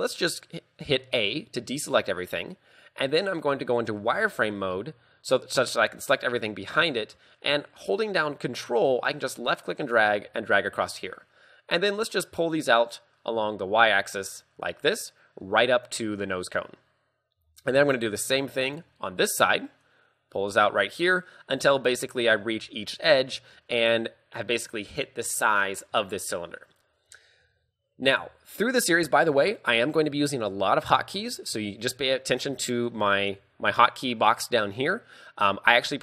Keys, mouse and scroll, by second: 1.2 scroll down 1, 4.1 z, 9.1 ctrl+click, 12.6 click, 17.5 a, 17.9 ctrl+click, 19.9 click, 28.9 n.